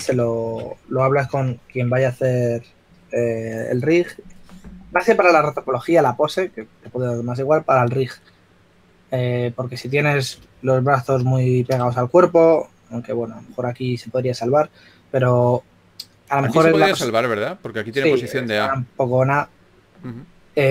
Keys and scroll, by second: 0.2 s, 1.2-3.7 typing.